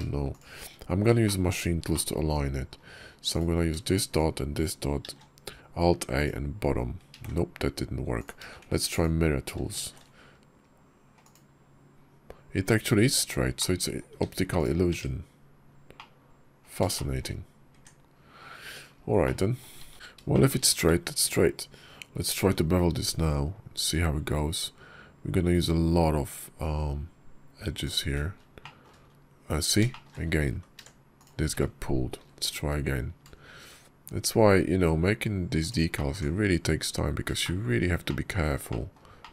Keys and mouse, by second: 0.1 shift+click, 1.1 shift+click, 1.8 middle click, 4.0 shift+click, 5.0 alt+a, 7.1 ctrl+z, 8.0 click, 13.4 click, 14.8 Tab, 15.8 click, 16.8 shift+click, 17.6 Tab, 18.5 Tab, 19.1 click, 19.9 ctrl+z, 20.2 shift+click, 22.1 ctrl+b, 28.2 middle click, 28.5 shift+click, 29.8 shift+click, 30.4 ctrl+z, 31.0 shift+click, 32.0 ctrl+v, 33.0 ctrl+b, 35.8 shift+click, 37.3 shift+click, 38.5 shift+click, 39.1 shift+click.